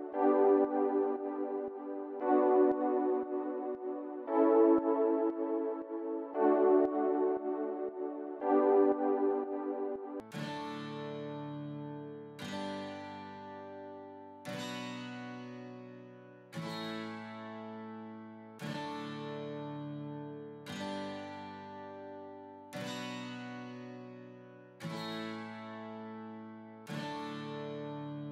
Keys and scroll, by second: 9.8 s.